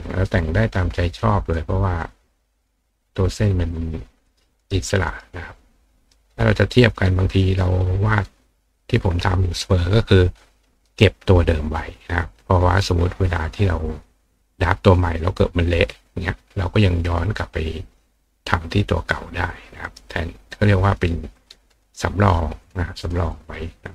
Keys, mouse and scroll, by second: 0.4 click, 1.4 click, 2.0 click, 2.9 click, 3.2 click, 4.2 click, 4.6 right click, 5.0 right click, 6.1 click, 19.8 right click, 21.3 click, 22.6 click, 23.0 click, 23.3-23.9 drag.